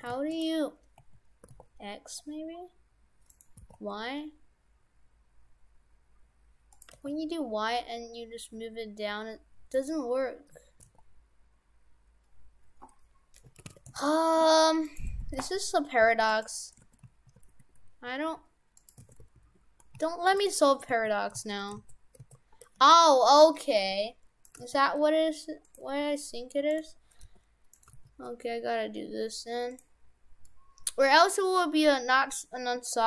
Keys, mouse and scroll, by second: 0.0 shift+f, 1.0 a, 1.5 r, 3.6 r, 7.0 g, 10.8 r, 14.9 right click, 15.2 shift+f, 16.9 shift+f, 19.2 shift+f, 20.5 right click, 20.9 ctrl+z, 21.4 ctrl+z, 21.8 ctrl+z, 22.2 ctrl+z, 23.4 middle click, 23.8 g, 24.6 g, 25.9 g, 27.2 g, 27.9 g, 30.5 middle click.